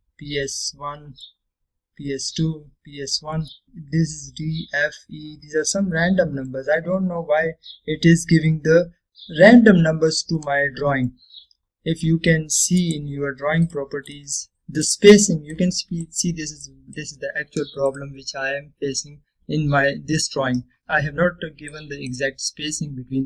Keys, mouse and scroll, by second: 0.1-0.5 scroll down 1, 0.5-1.1 middle drag, 2.6-3.6 scroll down 1, 3.6 scroll up 1, 6.1 scroll down 1, 7.0 scroll up 1, 7.7-8.7 scroll down 1, 8.7-9.3 scroll up 1, 10.0-11.2 scroll down 1, 11.5-12.3 middle click, 12.1 scroll down 1, 14.0 right click, 14.5-23.0 drag, 15.9-16.2 click, 18.0-18.3 click, 20.8-23.0 drag, 23.1-23.2 drag.